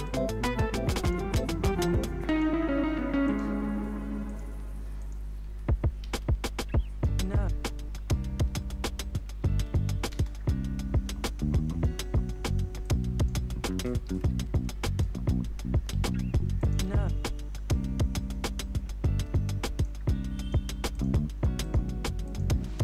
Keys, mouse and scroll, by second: 0.0 click, 1.3 [, 2.3 click, 3.5 [, 4.3 click, 5.2 [, 6.0 ctrl+a, 7.0 alt+[, 7.5-8.4 typing, 10.1 space, 12.8 click, 14.0 ctrl+shift+c, 14.9 Return, 15.9 ctrl+d, 16.6 click, 16.9 s, 17.7-20.4 drag, 22.7 ctrl+d.